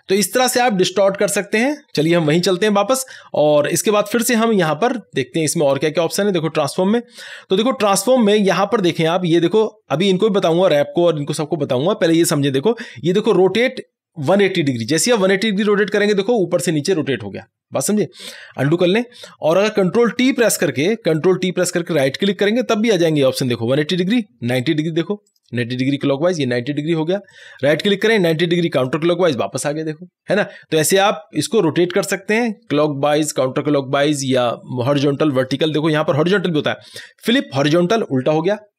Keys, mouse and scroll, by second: 2.3 click, 2.5 ctrl+Tab, 3.6 click, 14.8 click, 14.8 click, 18.3 click, 18.6 ctrl+z, 20.9 ctrl+t, 22.0-24.3 right drag, 25.3-27.4 drag, 27.4-28.8 right drag, 28.8-31.0 drag, 35.3 click, 35.4 right click, 37.3 click.